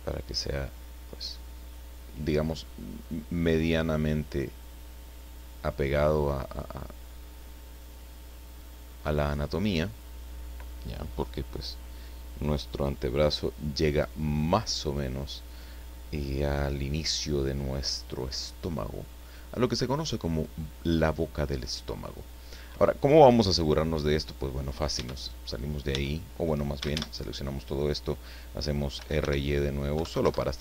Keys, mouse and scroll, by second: 3.8-6.8 drag, 7.3-7.6 scroll down 1, 7.8-9.5 middle drag, 19.8-20.4 scroll up 2, 25.0 Tab, 25.9 Tab, 26.8 a, 28.9 r, 29.2 y, 29.9 KP_9, 30.1 KP_0, 30.2 KP_Enter.